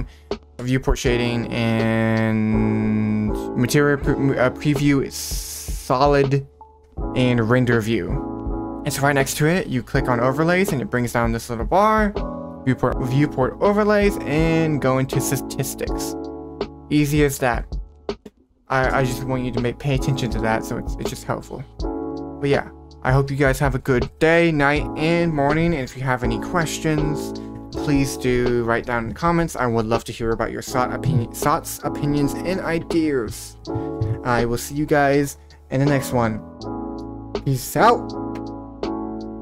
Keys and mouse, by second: 17.6 click, 18.2 middle click, 22.8 click.